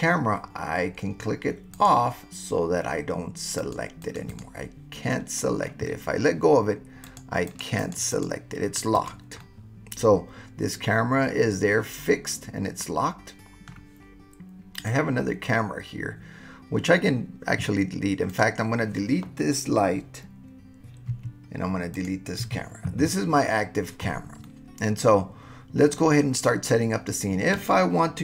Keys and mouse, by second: 1.7 click, 3.6 click, 4.1 click, 4.3 click, 5.1 middle click, 5.1 click, 5.2-5.6 middle drag, 7.0 click, 7.5 click, 7.8 click, 8.1 click, 9.0 click, 9.4-13.8 middle drag, 14.8 click, 18.3 click, 21.1 Delete, 22.4 Delete, 24.5-26.1 drag.